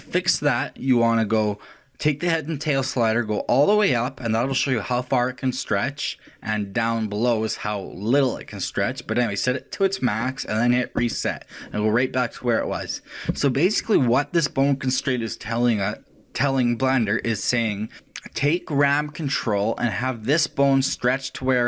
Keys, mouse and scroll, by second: 2.9 click, 11.0 click.